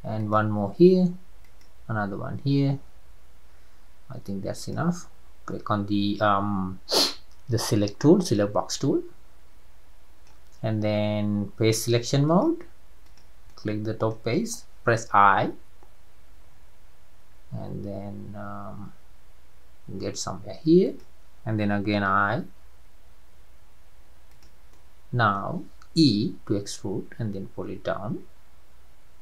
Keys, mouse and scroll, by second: 4.6-7.7 drag, 8.2 click, 8.8-11.9 middle drag, 12.3 click, 13.0 click, 13.5-15.4 middle drag, 15.4 i, 22.1 i, 24.7-26.6 middle drag, 26.6 e.